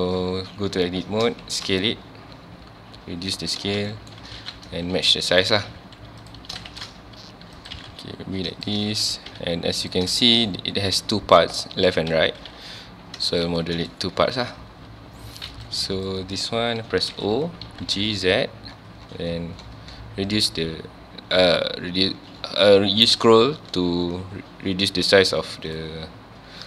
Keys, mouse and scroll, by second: 1.0 s, 3.4 click, 3.6 scroll up 1, 3.9-5.6 shift+middle drag, 5.6 g, 6.3 click, 6.5 s, 8.6 click, 9.0 1, 9.3 z, 9.8 click, 10.2 shift+middle click, 10.4-10.8 scroll up 1, 12.4 g, 13.4 click, 13.6 shift+middle click, 13.7 shift+middle click, 13.9 scroll up 1, 15.5 1, 15.7 click, 17.1 o, 25.8 click.